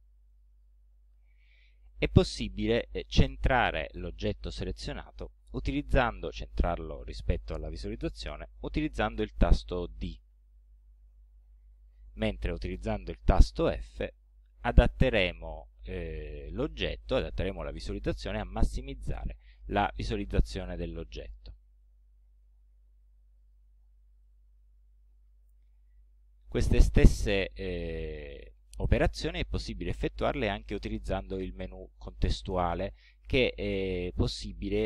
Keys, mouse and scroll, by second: 0.3 click, 3.4 right click, 10.3 d, 14.3 f, 22.2-23.3 scroll down 4, 23.5 scroll down 2, 24.3-26.1 middle drag, 26.2 scroll down 2, 26.6 scroll up 2.